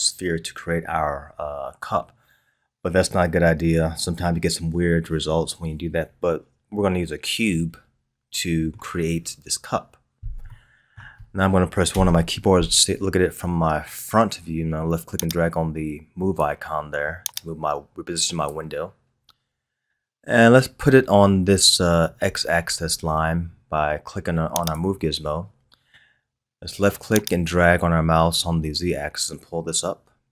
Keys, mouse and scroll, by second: 7.5-11.8 middle drag, 11.8 KP_1, 15.3-20.3 drag, 24.6 click, 27.2-30.3 drag.